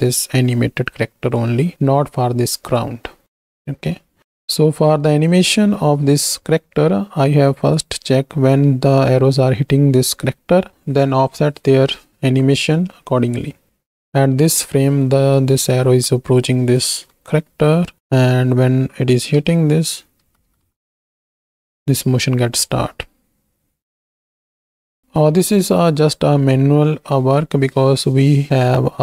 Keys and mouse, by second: 3.2-3.9 drag, 4.2 ctrl+z, 13.4 click, 14.0 Right, 17.5 Right, 18.0 Right, 19.4 Right, 20.3 Right, 20.5 Right, 20.7 Right, 20.9 Right, 21.2 Right, 21.4 Right, 21.6 Right, 22.0 Right, 23.1 space, 26.0 space.